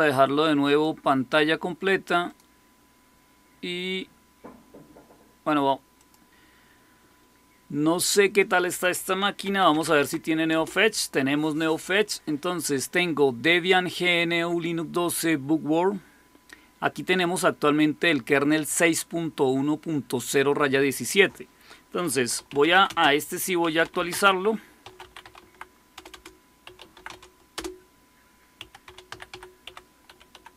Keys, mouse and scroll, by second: 0.6 click, 2.2 click, 5.9 click, 8.0 click, 8.6 click, 9.1-10.4 typing, 16.8-18.5 drag, 20.9 click, 22.0-30.5 typing.